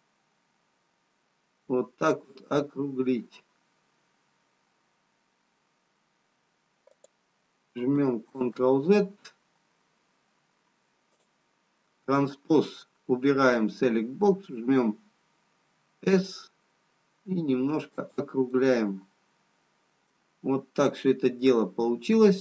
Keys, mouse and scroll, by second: 10.2 ctrl+z, 12.1 click, 15.2 s, 19.0 middle click, 20.5 scroll down 2, 21.8 middle click.